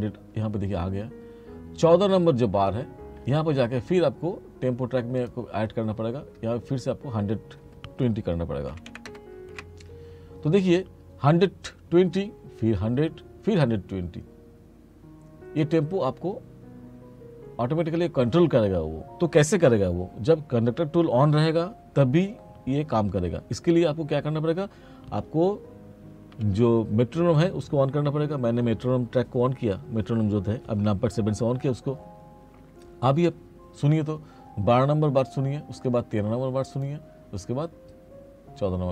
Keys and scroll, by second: 8.8 1, 9.6 Return, 26.4 7.